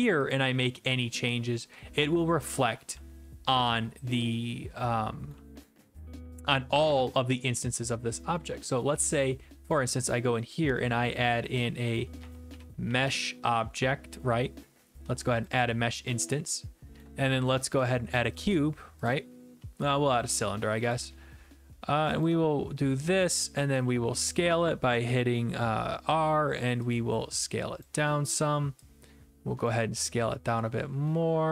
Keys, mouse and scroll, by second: 0.3 click, 2.9-5.2 typing, 5.3 right click, 8.5 right click, 9.7 click, 12.0-13.5 typing, 15.3 click, 15.5 click, 16.4 w, 16.9 w, 17.0 right click, 17.0 w, 17.9 click, 20.2 e, 22.2 ctrl+click, 23.4 e, 23.7 r, 27.8 click, 29.7 click.